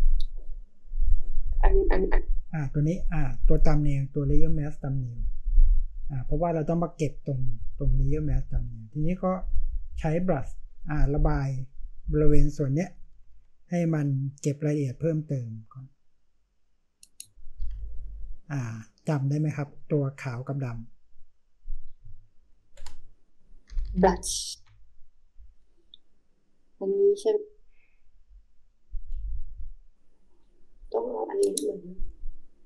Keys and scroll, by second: 12.5-13.9 typing, 17.6-18.3 typing, 22.0 space, 23.7-24.5 typing, 29.1-29.8 typing.